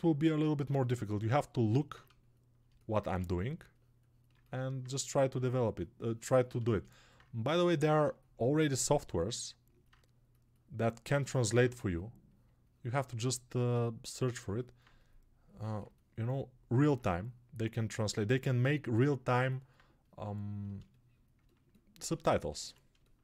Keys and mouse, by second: 1.6-4.3 alt+right drag, 3.0 1, 4.3-13.6 alt+drag, 14.4 click, 15.7 alt+click, 16.8-21.3 ctrl+drag, 21.3-22.9 alt+shift+right drag, 22.9-23.2 alt+shift+drag.